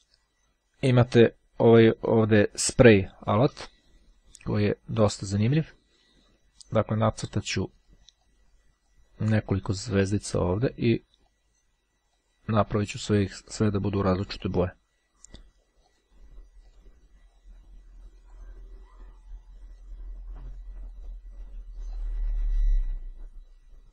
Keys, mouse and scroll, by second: 5.0 click, 7.5 click, 9.6 click, 11.3 click, 14.5 click, 15.9 click, 16.7 click, 18.1 click, 19.8 click, 21.0 click, 21.9 click.